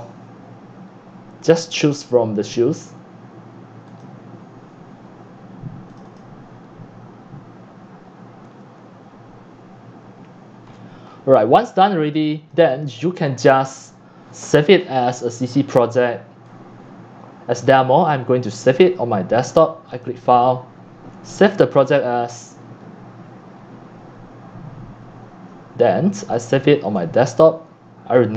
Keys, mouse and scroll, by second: 6.2 click, 10.6 click, 10.6 scroll, 10.8 scroll down 11, 11.1 middle click, 11.1-11.6 scroll, 11.6 scroll up 7, 11.7 x, 12.0 c, 12.5 click, 12.6 x, 12.9 c, 13.4 click, 16.4 click, 17.1-17.6 drag, 25.6-27.2 drag, 27.5-28.3 drag.